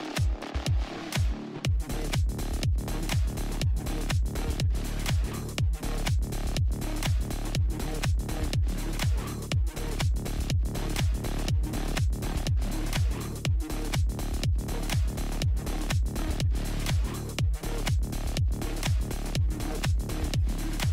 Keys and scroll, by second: 16.6 alt+space, 17.3 alt+i, 17.9 alt+space, 19.8 alt+i.